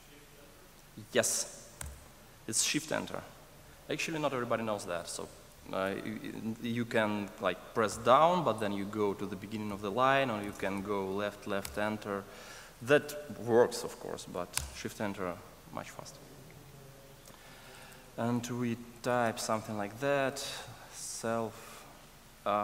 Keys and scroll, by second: 1.8 shift+Return, 5.7 super+z, 14.5 shift+Return.